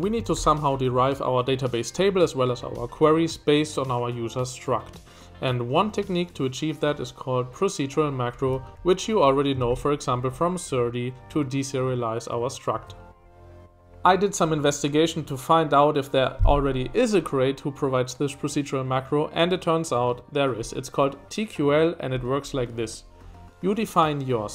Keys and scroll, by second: 0.0-1.3 typing, 8.2-9.6 typing, 12.7 Escape.